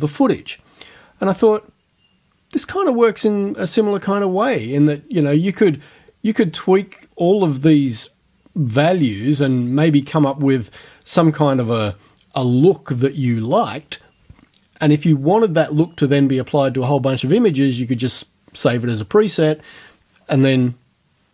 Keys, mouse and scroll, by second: 6.1-9.2 drag, 9.5-11.0 drag.